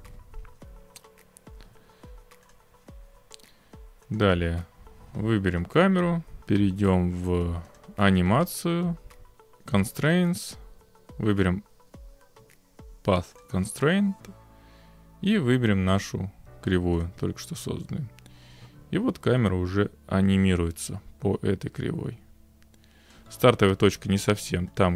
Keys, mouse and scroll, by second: 0.0 scroll, 2.5 click, 4.2 click, 7.8 click, 13.4 click, 14.5 click, 17.0-18.1 drag, 23.1-24.2 drag, 24.8 click.